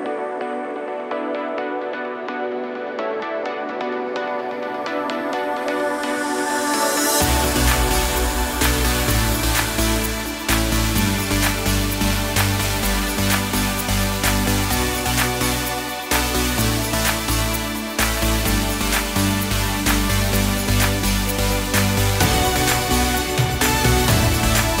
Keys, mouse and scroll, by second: 0.1 shift+click, 0.2 middle click, 0.5 shift+click, 0.6 middle click, 0.9 shift+middle click, 1.3 shift+click, 1.4 shift+click, 2.5 u, 4.2 shift+middle click, 4.2 a, 4.4 scroll up 2, 4.5 middle click, 5.1 scroll down 3, 5.5 middle click, 5.9 scroll up 1, 6.2 shift+middle click, 6.7 scroll up 1, 7.1 shift+middle click, 8.7 click, 10.2 click, 10.7 click, 11.2 ctrl+t, 12.1 click, 13.7 scroll up 2, 14.1 shift+middle click, 15.7 right click, 19.4 ctrl+alt+KP_0, 20.0 click, 21.1 g, 22.7-23.6 scroll down 13, 23.6-24.2 scroll up 5, 24.2 middle click, 24.5-24.8 scroll down 7.